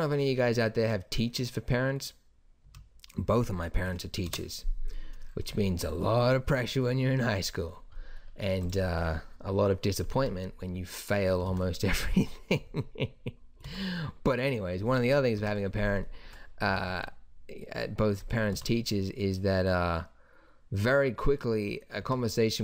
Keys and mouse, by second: 2.7 Escape, 3.8 KP_1, 4.3 KP_0, 4.9-5.2 middle drag, 8.6-11.5 drag, 11.5 alt+a, 13.6 alt+a, 15.4 shift+Left, 16.7 r, 18.5 alt+a, 22.0 Escape.